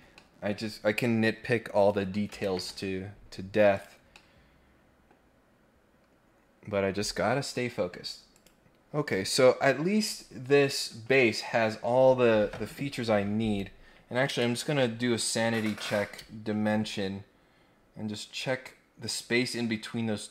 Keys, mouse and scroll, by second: 0.1 middle click, 1.7 click, 3.7 click, 4.1 middle click, 8.3 click.